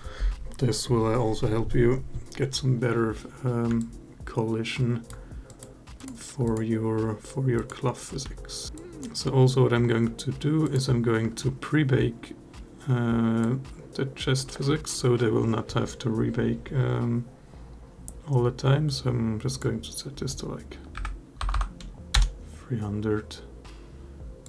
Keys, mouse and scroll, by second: 3.6-4.9 alt+drag, 5.2 click, 5.8 click, 6.2 click, 7.3 click, 8.0 g, 8.7 drag, 8.7 space, 13.2 click, 19.3-21.9 drag, 21.3 0, 24.2 click.